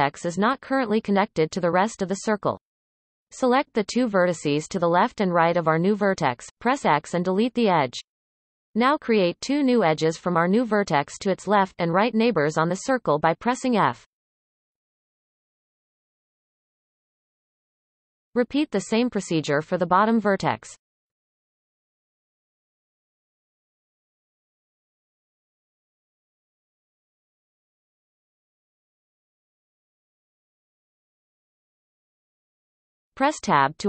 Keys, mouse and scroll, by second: 1.5 click, 2.3 shift+click, 3.0 x, 7.9 click, 8.3 shift+click, 9.2 f, 9.7 click, 10.3 shift+click, 11.2 f, 11.6-15.3 scroll down 1, 15.3 scroll down 1, 15.4-17.5 shift+middle drag, 17.5 drag, 18.6 shift+d, 19.1 r, 22.0 e, 24.8 click, 25.3 shift+click, 26.0 x, 27.5 click, 27.9 shift+click, 28.8 f, 29.9 click, 30.5 shift+click, 31.4 f, 32.6 Tab, 33.0-33.4 scroll down 3, 33.4-33.8 shift+middle drag.